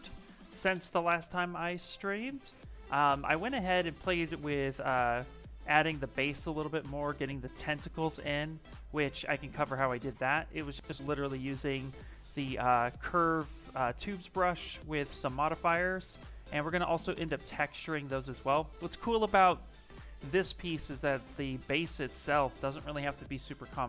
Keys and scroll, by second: 8.8 b.